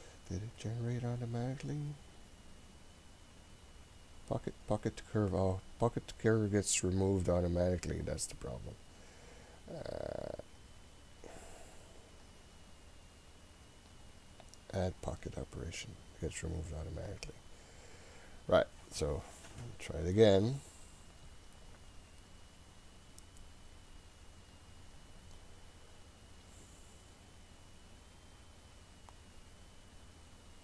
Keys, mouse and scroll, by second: 1.4-3.4 scroll down 7, 3.4-5.0 scroll down 1, 5.0 click, 5.5-7.5 scroll up 8, 8.1-9.2 drag, 11.3 click, 12.3-13.6 scroll down 3, 13.6-14.7 scroll down 2, 14.7 click, 15.7-17.1 scroll up 3, 17.1-30.6 drag, 17.1-19.5 scroll up 1.